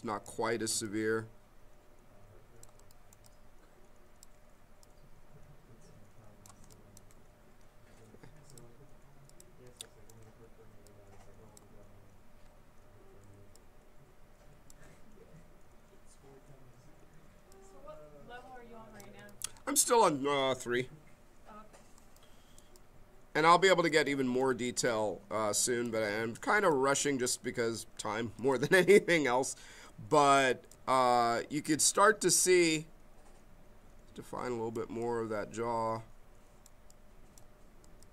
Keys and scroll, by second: 13.3 m, 29.8 b.